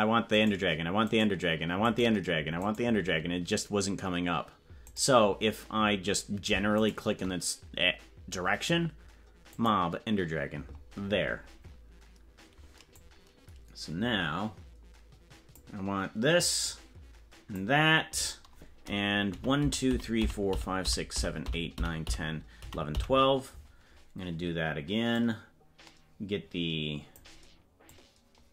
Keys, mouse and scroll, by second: 12.9-15.8 drag, 16.6-17.7 drag, 17.7 middle click, 19.5 Right, 19.9-21.7 Right, 22.0-23.7 Right, 25.1-27.2 drag, 27.9-28.5 drag.